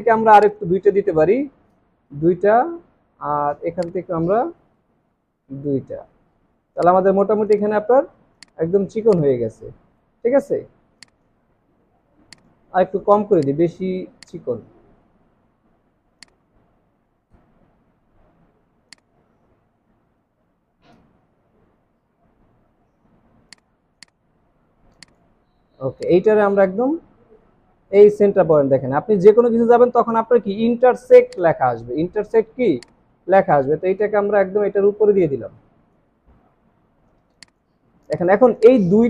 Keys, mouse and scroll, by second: 1.6 click, 2.0 click, 4.7 Right, 5.0 Right, 8.2 space, 8.8 alt+scroll down 2, 9.0 space, 10.2 alt+scroll up 1, 11.4-11.9 alt+scroll up 3, 14.0 space, 14.8 alt+scroll up 2, 17.2 Right, 21.7 alt+scroll down 1, 25.5 alt+scroll up 3, 32.0 alt+scroll up 1, 36.5 alt+scroll down 1, 37.2 space, 37.7 alt+scroll down 1, 38.0 space.